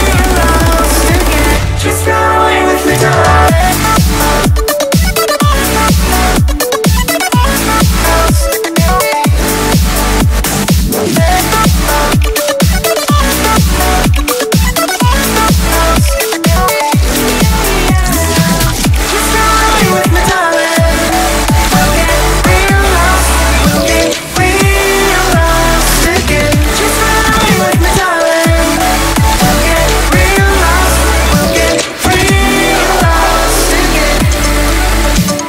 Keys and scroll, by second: 0.3 u, 2.0 p, 12.5 0, 16.2 0, 20.3 space.